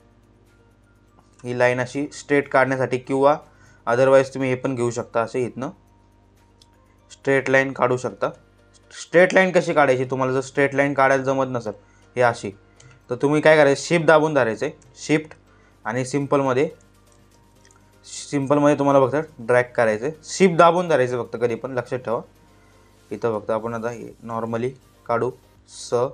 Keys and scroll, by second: 2.9 ctrl+z, 7.7 ctrl+z, 12.3 ctrl+z, 13.4 shift+Caps_Lock, 14.0 Caps_Lock, 16.8 ctrl+z, 21.0 ctrl+z.